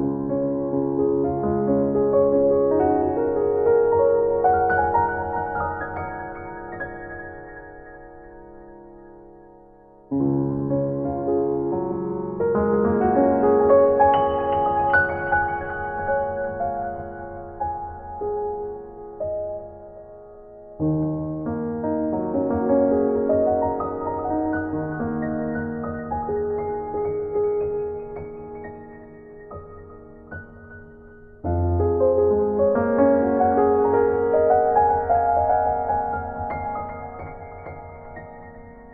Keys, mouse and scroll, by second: 0.4 middle click, 1.5 z, 1.8 ctrl+s.